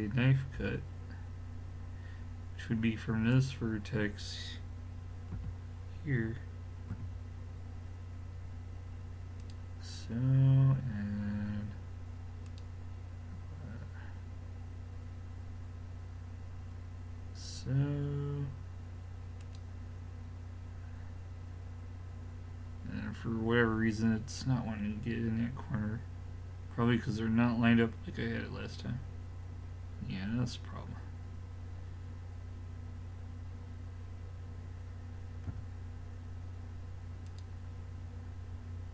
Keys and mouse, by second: 0.6 k, 4.1-9.7 middle drag.